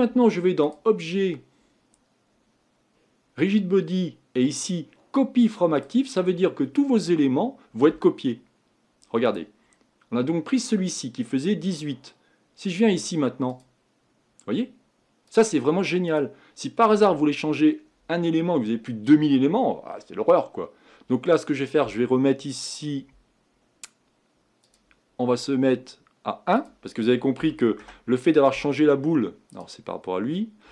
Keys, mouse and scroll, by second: 9.6 click, 10.8 click, 13.7 click, 15.4 click, 16.2 click, 16.9-17.5 scroll down 2, 17.5-19.4 scroll up 2, 29.7 click.